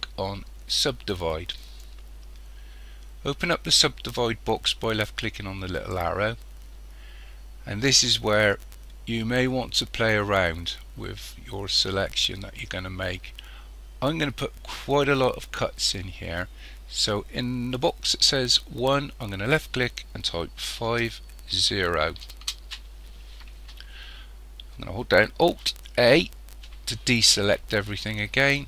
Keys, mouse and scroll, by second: 5.8 click, 19.5 click, 26.0 alt+a.